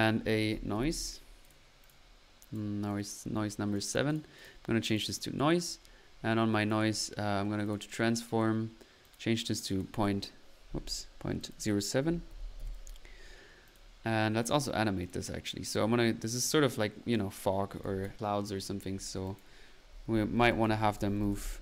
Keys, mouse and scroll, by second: 0.1-1.5 typing, 1.4 click, 1.8 click, 9.0-10.0 scroll up 2, 11.4 click, 13.6 drag, 14.4-14.8 drag, 15.0 drag, 16.0 middle click, 17.8 click, 18.0 click, 19.2-19.5 drag.